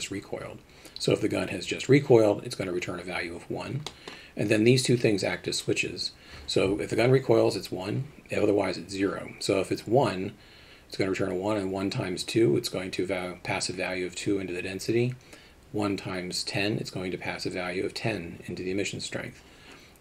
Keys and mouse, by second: 3.9 middle click.